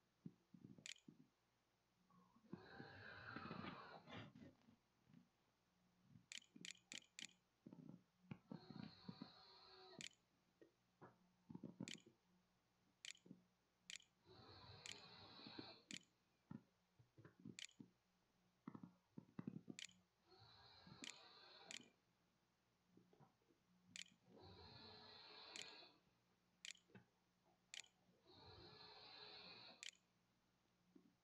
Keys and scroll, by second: 0.7 a, 4.0 a, 5.2-7.0 typing, 9.8-17.4 typing, 20.0-25.3 typing, 25.4 Right, 26.9 shift+Return, 26.9-28.3 typing, 28.8 Return, 29.3 Right, 30.3 Down, 30.9-31.2 typing.